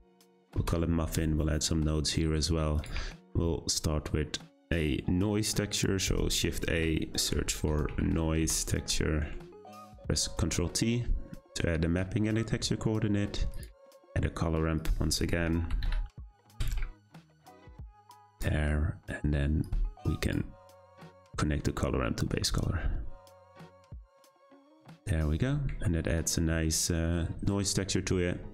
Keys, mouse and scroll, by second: 0.6 f, 2.0-8.4 drag, 10.3 ctrl+t, 13.5 click, 19.6-20.3 drag, 21.3-23.9 drag.